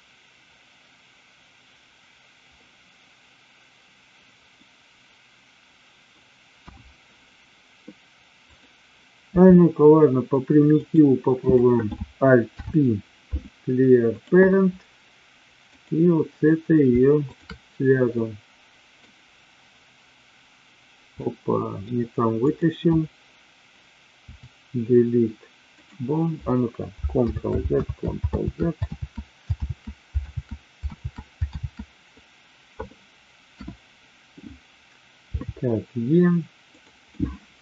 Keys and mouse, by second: 4.6-6.1 middle drag, 6.7 KP_1, 8.3 click, 9.3 e, 10.7 click, 11.3 click, 12.5 alt+p, 18.2 middle click, 21.1 middle click, 22.3 click, 24.2 Delete, 27.2 ctrl+z, 27.8 ctrl+z, 28.3 ctrl+z, 28.9 ctrl+z, 29.6 ctrl+z, 30.2 ctrl+z, 30.8 ctrl+z, 31.5 ctrl+z, 33.6 KP_1, 35.3 e, 37.2 middle click.